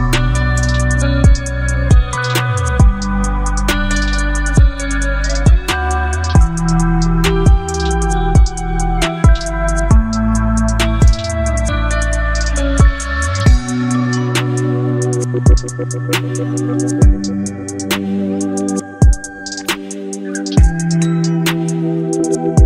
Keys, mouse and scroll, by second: 1.8 click, 3.0 v, 3.3 ctrl+t, 5.0-7.8 alt+drag.